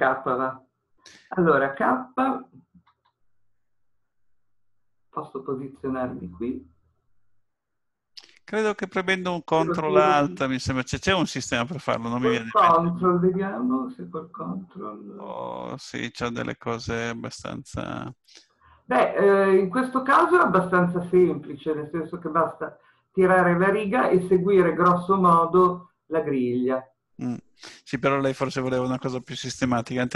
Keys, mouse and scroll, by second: 2.9 k.